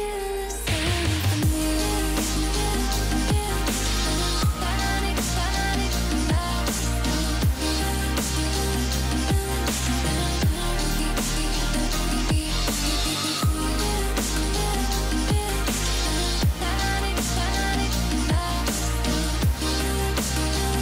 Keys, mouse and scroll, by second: 0.1-0.6 alt+scroll down 1, 0.9-1.4 alt+scroll up 1, 1.4 click, 4.5 click, 5.1-6.0 alt+scroll up 2, 6.0 scroll up 1, 6.2 click, 6.7-7.1 alt+scroll up 2, 7.5-9.1 shift+click, 9.5 z, 10.4 ctrl+z, 11.5-13.5 drag, 13.8-14.3 alt+scroll down 1, 14.7-15.1 alt+scroll up 1, 15.1-16.1 click, 16.4-16.8 alt+scroll down 1, 17.1-17.6 alt+scroll up 1, 17.6-18.3 click, 18.9-19.2 alt+scroll up 1, 19.7-20.8 alt+scroll down 1.